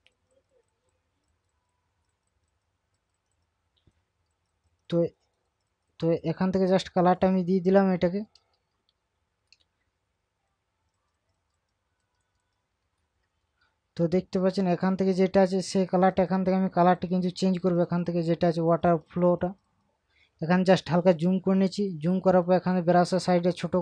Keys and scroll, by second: 8.6 ctrl+KP_Subtract, 14.0 ctrl+KP_Subtract, 20.5 ctrl+KP_Add.